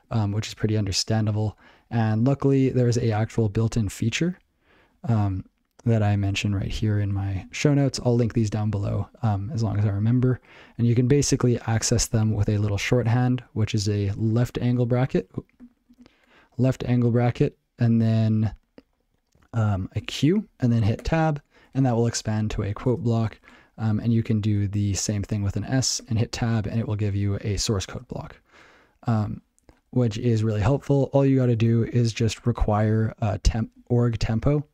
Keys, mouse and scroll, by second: 2.8 ctrl+n, 3.8 ctrl+n, 4.2 ctrl+n, 5.2 ctrl+e, 5.3 ctrl+n, 5.5 ctrl+e, 5.8 ctrl+n, 6.2 ctrl+a, 6.5 ctrl+p, 7.0 alt+q, 7.5 ctrl+n, 7.7 ctrl+n, 7.8 ctrl+n, 8.5 ctrl+n, 8.7 ctrl+n, 8.9 ctrl+p, 10.8 alt+e, 11.4 alt+e, 12.0 ctrl+a, 30.3 ctrl+w, 31.6 ctrl+n, 31.7 ctrl+n, 31.9 ctrl+n, 32.0 ctrl+n, 32.1 ctrl+n, 32.3 ctrl+space, 32.4 ctrl+n, 32.6 ctrl+n, 32.8 ctrl+p, 33.4 ctrl+g, 33.6 ctrl+p, 34.2 ctrl+e, 34.3 ctrl+p.